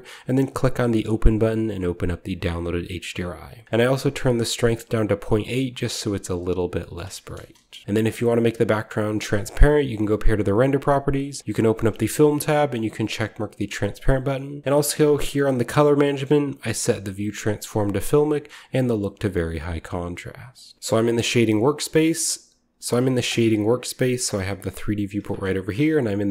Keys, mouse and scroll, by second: 1.5 click, 2.5 click, 6.8 middle click, 7.4 KP_0, 9.4-10.6 drag, 10.3-12.6 scroll down 2, 11.4 click, 12.6 click, 12.7-13.3 scroll down 2, 12.9 click, 13.3-14.6 drag, 13.9-15.4 scroll down 1, 20.4-20.7 drag, 20.7 ctrl+alt+Left, 21.9 click, 23.1 click, 24.5-26.3 drag, 25.7-26.3 z.